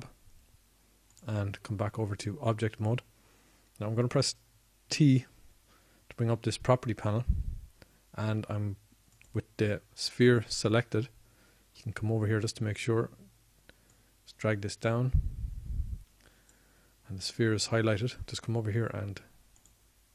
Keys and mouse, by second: 2.7 Tab, 4.6 Tab, 8.5 t, 19.7-20.1 middle drag.